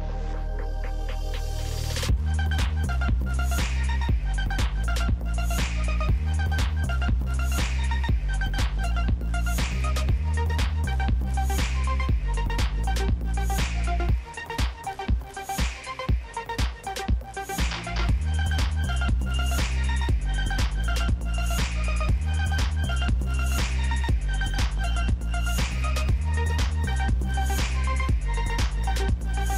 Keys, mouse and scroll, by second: 3.2 ctrl+h, 4.4 ctrl+j, 6.2 double click, 6.7 g, 6.8 Return, 7.0 g, 9.7 scroll down 4, 10.7 shift+click, 11.9 ctrl+g, 12.8 ctrl+a, 16.2 ctrl+d, 20.2-21.1 scroll down 1, 26.8-29.4 scroll up 1, 29.4 scroll.